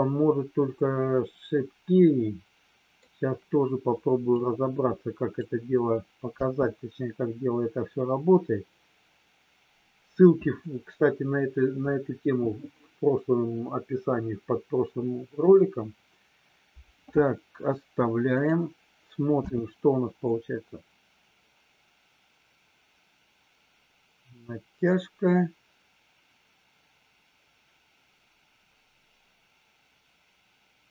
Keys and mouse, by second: 4.4-5.5 drag, 6.4 space, 19.5 space, 20.2-30.9 drag.